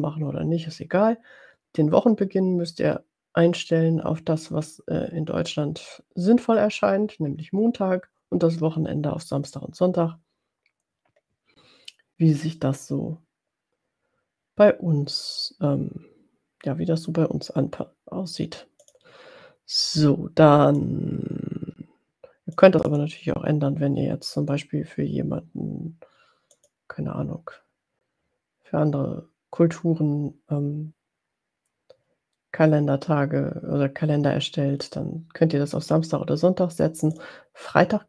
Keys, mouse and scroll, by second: 18.9 click, 21.1 click, 23.2 drag, 26.6 click, 37.6 click.